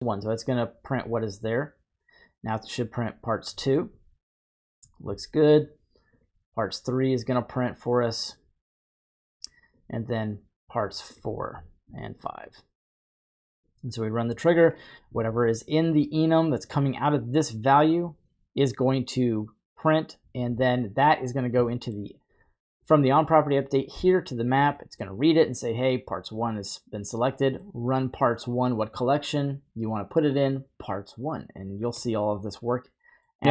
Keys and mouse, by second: 0.1-1.6 drag, 3.6 middle click, 5.5-6.8 drag, 7.9 click, 9.3-10.3 drag, 11.1 click, 12.3-13.5 drag, 13.6 click, 17.9-20.7 drag, 21.7 middle click, 23.7 click, 24.8 middle click, 27.4 middle click, 32.4 middle click.